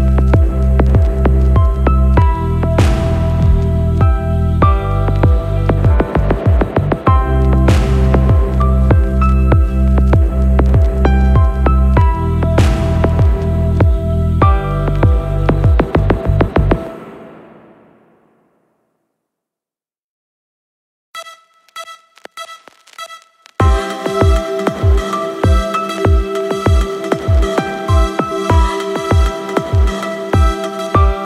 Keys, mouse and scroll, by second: 2.4-4.6 drag, 5.4 click, 12.3 click, 12.8 click, 14.0 click, 17.4 right click, 20.3 click, 21.8 click, 24.3 n, 25.4 click, 26.0-26.9 scroll up 2, 26.9-27.3 scroll down 1, 27.7 click, 27.9 n, 30.6-31.0 scroll down 3.